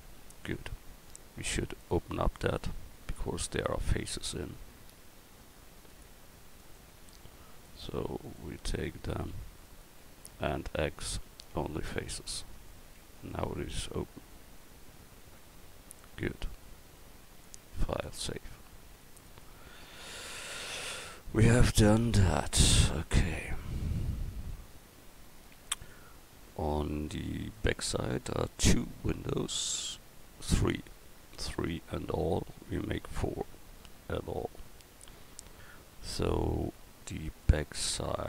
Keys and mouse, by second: 2.3 right click, 3.5 Tab, 10.3 x, 13.0 Tab, 14.7 middle click, 14.9 middle click, 18.4-19.9 middle drag, 22.6 KP_1, 35.1-35.9 middle drag.